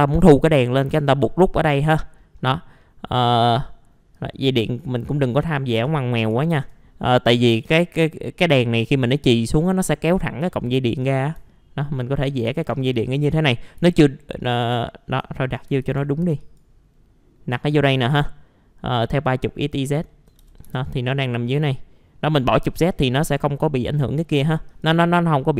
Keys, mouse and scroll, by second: 0.6-1.8 scroll up 1, 1.8-3.1 scroll down 2, 2.2 middle click, 3.1 click, 4.8 middle click, 5.2 scroll up 1, 5.4 middle click, 5.8 ctrl+click, 6.4 ctrl+right click, 7.4 click, 7.8 scroll down 1, 11.0 click, 12.4 shift+click, 12.8 right click, 13.6 scroll up 1, 14.4 middle click, 14.6 scroll down 1, 14.8 alt+middle click, 15.8 alt+a, 16.4 click, 20.1 alt+middle click, 20.4 typing, 20.8-21.5 scroll down 1, 21.5 click, 23.3 scroll up 1, 23.6 middle click, 24.7 click, 25.2-25.5 scroll down 1.